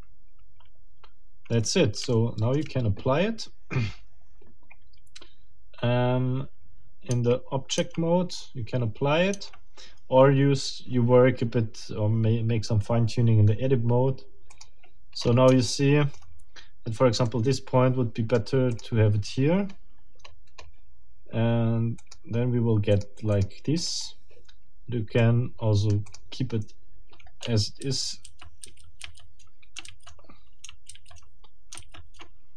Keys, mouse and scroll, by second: 0.6 scroll down 2, 1.6 scroll down 2, 2.1 shift+middle click, 7.1 Tab, 9.3 Tab, 14.5 middle click, 15.2-15.5 scroll up 2, 15.6 shift+middle click, 16.2-16.6 shift+scroll up 2, 17.2-18.6 right drag, 18.7 click, 19.2-19.6 scroll down 2, 19.8 scroll down 2, 20.2-20.8 scroll up 4, 22.0 click, 22.9 click, 23.3 click, 23.8 click, 25.2-26.3 right drag, 26.1 click, 27.8 ctrl+z.